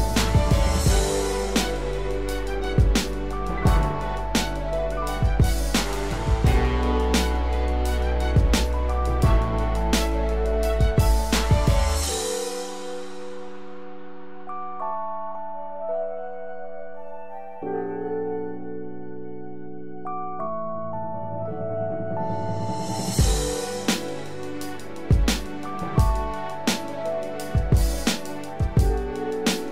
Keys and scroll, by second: 2.7 ctrl+=.